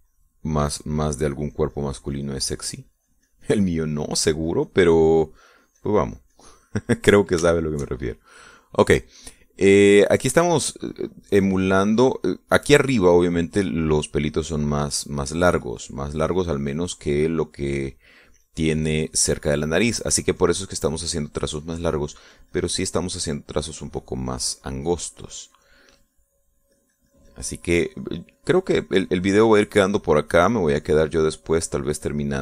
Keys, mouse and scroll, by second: 9.0 shift+middle click, 11.7-16.8 drag, 17.0-21.7 drag, 21.9-27.3 drag, 28.3-32.4 drag.